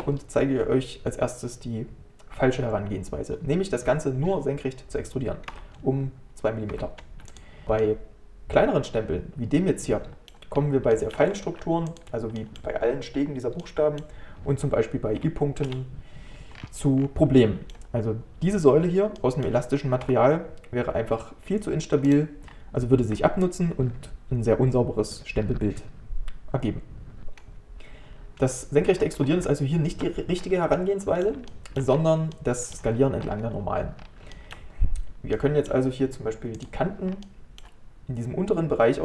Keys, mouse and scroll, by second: 7.6 middle click, 7.8-10.6 middle drag, 10.6-10.9 scroll up 1, 10.9 shift+middle click, 11.5 3, 12.4-15.7 middle drag, 15.7 KP_Decimal, 16.6 scroll up 1, 16.6-17.4 scroll down 12, 17.4-20.1 middle drag, 20.1 g, 22.5-25.6 scroll up 1, 29.0 ctrl+z, 29.2 ctrl+z, 29.4 ctrl+z, 30.4-30.8 scroll down 3, 30.8-31.9 middle drag, 31.9-32.3 scroll down 1, 32.3 middle click, 33.2-34.0 scroll up 1, 34.0-34.3 scroll down 1, 34.3-36.6 shift+middle drag, 36.6 click, 37.1 scroll up 2, 37.3-39.0 middle drag.